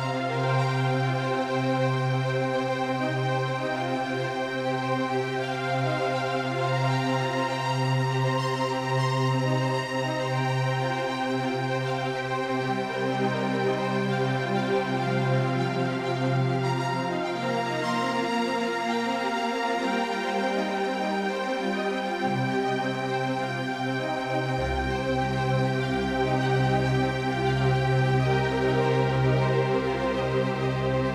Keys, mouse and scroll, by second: 4.1-6.4 drag, 8.0-12.8 drag, 14.1-16.4 drag, 16.8-19.2 drag, 19.2 ctrl+z, 20.0-23.9 drag, 20.7-28.6 right drag, 22.7 ctrl+z, 29.1-31.1 drag.